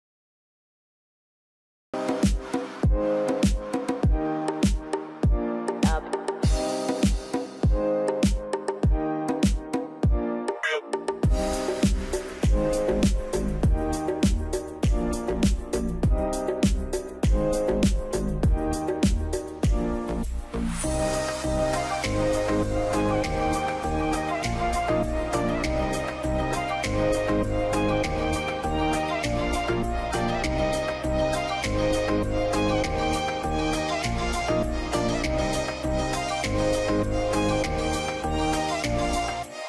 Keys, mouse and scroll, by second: 17.5 scroll up 1, 17.7 3, 17.9 5, 19.0 middle click, 19.9 middle click, 21.6 scroll down 1, 21.7 middle click, 21.8-22.3 scroll up 1, 22.9 scroll down 1, 23.7 middle click, 24.5 F3, 25.0 middle click, 25.2 scroll down 1, 26.5 q, 26.8 scroll up 1, 28.8-29.3 scroll down 1, 29.8 middle click, 30.1 scroll up 1, 31.3 scroll up 1, 32.0 F2, 32.7 scroll up 1, 33.1 middle click, 33.5 F2, 34.1 scroll up 1, 37.6 scroll down 1, 38.6 alt+middle click, 39.3 scroll up 1.